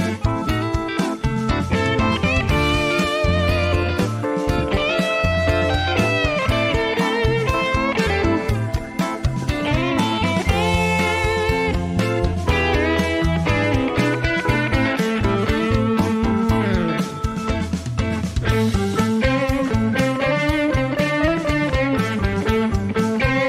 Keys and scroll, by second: 2.3 KP_0, 3.6 typing, 10.7 shift+a.